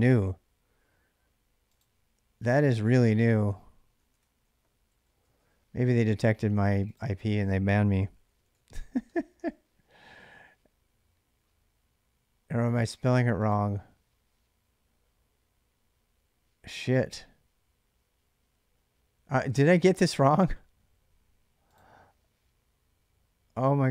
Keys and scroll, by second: 2.8-5.4 typing, 7.6-8.9 typing, 9.2 Return.